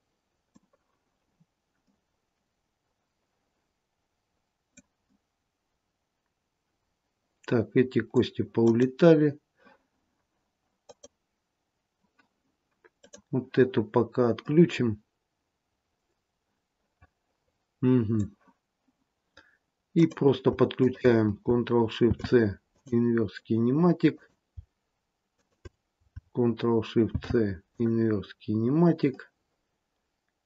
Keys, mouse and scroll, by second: 1.8 middle click, 5.0 middle click, 8.5 click, 10.8 click, 13.9-14.4 scroll down 1, 14.4 middle click, 19.9 click, 20.8 shift+click, 21.9 ctrl+shift+c, 24.1 click, 25.3 shift+click, 27.0 ctrl+shift+c, 29.1 middle click.